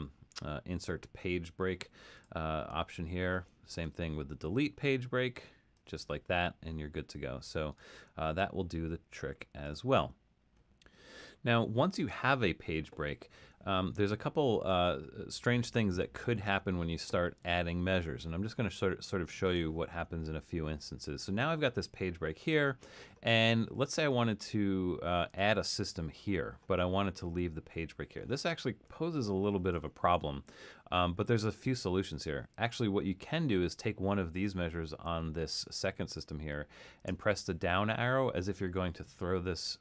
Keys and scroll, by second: 37.2 Down.